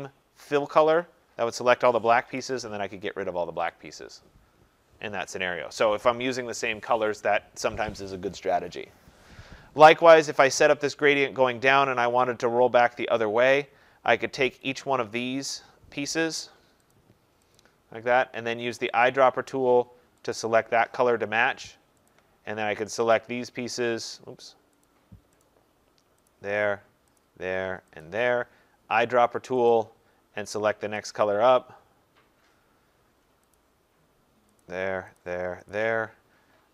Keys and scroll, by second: 2.2 Delete.